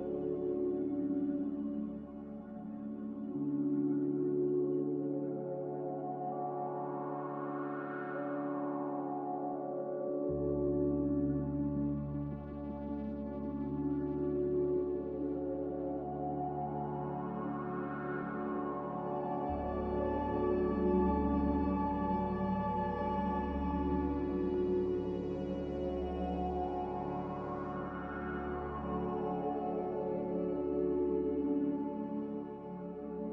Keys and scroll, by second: 3.0 typing, 6.2 typing, 9.3 typing, 17.2 ctrl+c, 17.4 ctrl+v, 18.9 typing, 19.3 Return, 20.9 typing, 22.9-25.6 typing, 26.8 Delete, 27.2 Delete, 27.8 Delete, 29.4 Delete, 31.3 s, 32.9-33.3 typing.